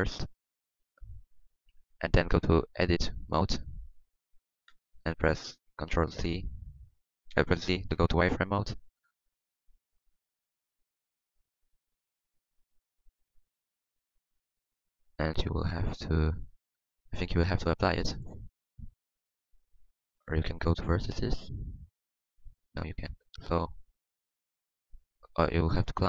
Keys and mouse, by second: 2.8 Tab, 3.3 Tab, 4.0 Tab, 4.4 z, 18.2 Tab, 20.1 Tab.